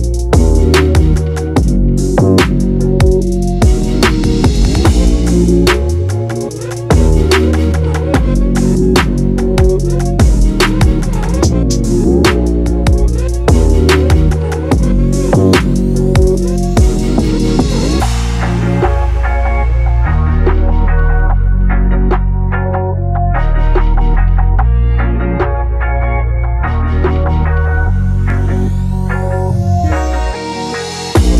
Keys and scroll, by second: 13.5 ctrl+j, 18.4 ctrl+t, 24.0 ctrl+j, 24.3 ctrl+t.